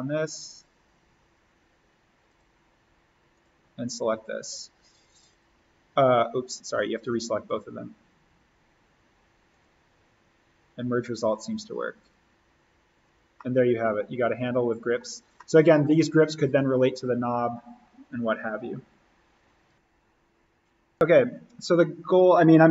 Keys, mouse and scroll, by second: 0.5 click, 6.4 right click, 7.4 click, 13.3-15.1 middle drag, 15.1 scroll down 1, 15.3-18.5 middle drag, 19.7 click.